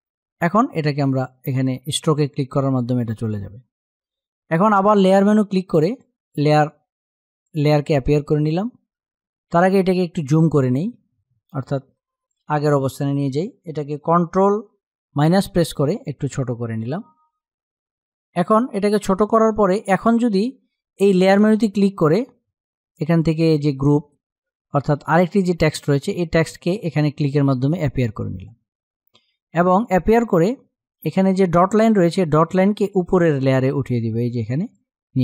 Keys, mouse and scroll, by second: 4.4 click, 11.3 space, 11.5 click, 14.5 space, 14.8 ctrl+-, 17.0 space, 17.3 click, 17.5 space, 19.3 click, 19.7 space, 21.1 click, 26.9 click, 29.3 click, 33.0-35.2 drag.